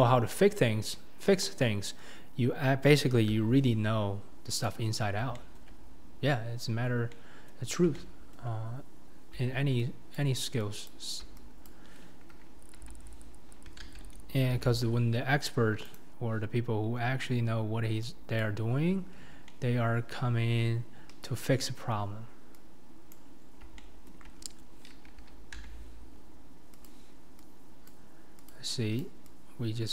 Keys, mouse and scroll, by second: 0.3-0.9 scroll down 1, 1.2 scroll down 1, 1.3 KP_1, 3.4 r, 5.0 middle click, 5.7-7.1 middle drag, 7.7 middle click, 8.5 middle click, 9.3-11.6 middle drag, 11.7 click, 12.8 h, 13.8 ctrl+z, 14.6 g, 16.7-18.1 scroll up 4, 18.4 shift+click, 19.2 scroll down 4, 19.5-21.1 middle drag, 21.1 KP_1, 22.0-22.5 scroll up 4, 23.1 click, 23.5 scroll down 1, 23.8 shift+middle click, 24.3-25.6 scroll down 2, 25.6 g, 27.9 click, 28.5 click, 29.0 click.